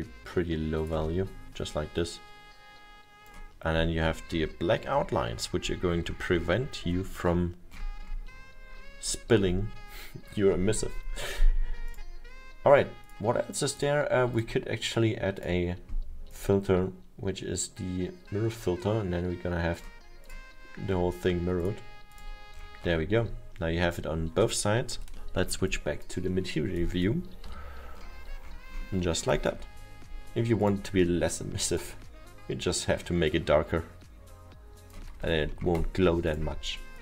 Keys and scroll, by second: 27.5 m.